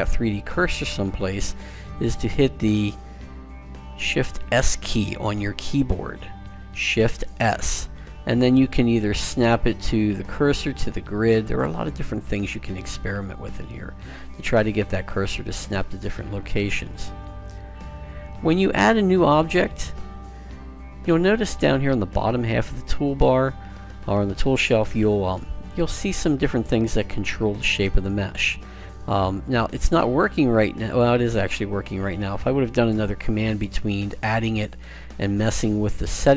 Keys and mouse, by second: 3.5 shift+s, 14.5-16.3 middle drag, 28.5 click.